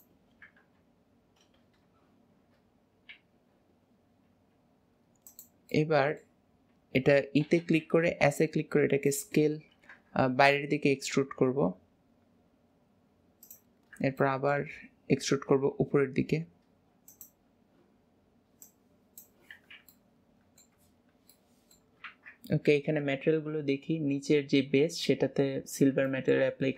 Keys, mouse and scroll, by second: 5.8-7.5 middle drag, 13.9-14.3 scroll down 2, 14.3 shift+middle click, 14.9-15.5 scroll down 2, 15.5 e, 18.7 click, 19.6 alt+z, 20.3 middle click, 21.2 scroll down 1, 21.4 middle click, 26.2 middle click.